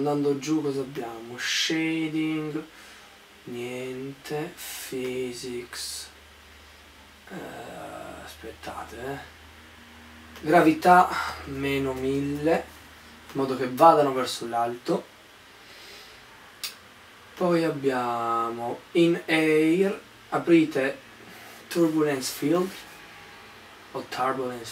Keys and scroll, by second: 11.7-13.0 typing.